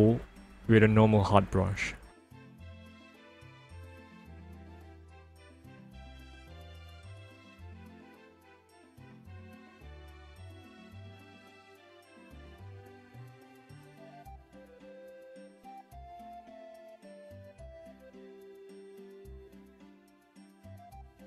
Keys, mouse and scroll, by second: 1.0-2.3 ctrl+alt+scroll up 1, 3.1 alt+scroll up 1, 5.8 click, 7.8 alt+right click, 8.9 right click, 10.7 click, 11.7 alt+right click, 15.0 alt+right click, 18.1 click, 20.0 click.